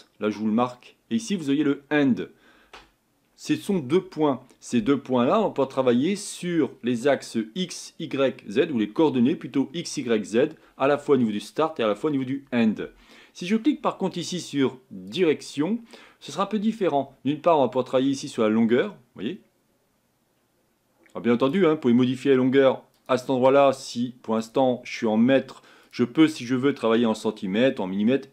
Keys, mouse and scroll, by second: 15.1 click, 18.2-20.9 drag.